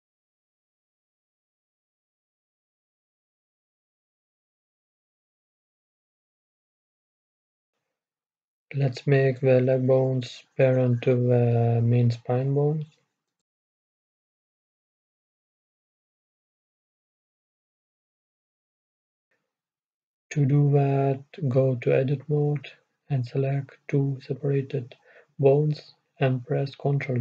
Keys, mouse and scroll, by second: 3.4-5.4 drag, 8.9-10.3 middle drag, 10.3-10.7 scroll up 1, 10.7 middle click, 11.3-11.6 scroll up 1, 11.6 middle click, 12.6-12.9 scroll up 1, 12.9-15.0 middle drag, 15.1-16.2 middle drag, 16.2 KP_1, 17.2 middle click, 17.8-19.4 middle drag, 19.6 middle click, 19.8-23.5 right drag, 23.5 ctrl+p, 26.3-27.2 drag.